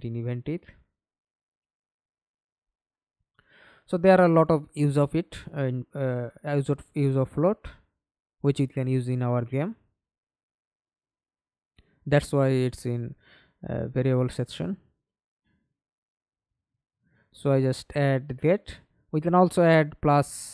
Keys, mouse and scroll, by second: 1.0 Escape, 1.7 middle click, 2.7 F11, 6.1 right click, 8.4-8.9 scroll down 3, 8.9 right click, 9.3-9.9 scroll up 1, 9.9-10.2 scroll down 3, 10.3-10.7 scroll up 2, 10.7 right click, 12.0 alt+click, 12.3-14.5 alt+scroll up 3, 14.5 scroll up 1, 14.7 double click, 19.5 1, 19.8 Return.